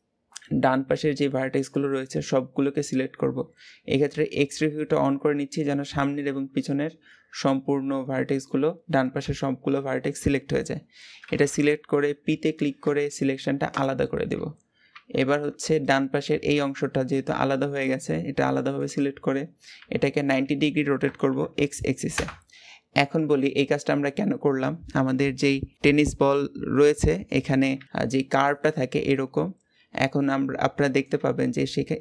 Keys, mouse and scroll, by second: 4.1-5.5 middle drag, 5.5 alt+z, 6.5-9.0 middle drag, 9.0 KP_1, 12.0 p, 14.1 Tab, 14.7 Tab, 15.6 click, 16.3 g, 19.5 r, 31.5 scroll up 2.